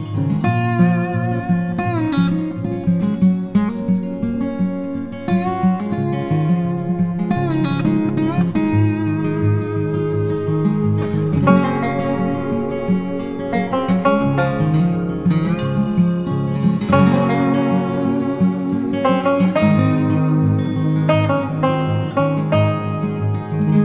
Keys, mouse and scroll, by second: 16.9 alt+click.